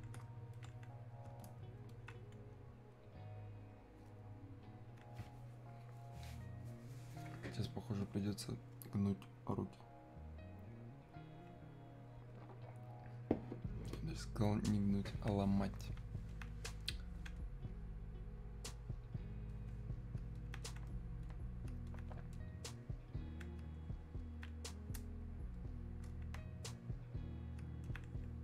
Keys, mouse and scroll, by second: 5.7-9.9 drag, 16.3-27.9 alt+drag, 27.9-28.4 alt+drag.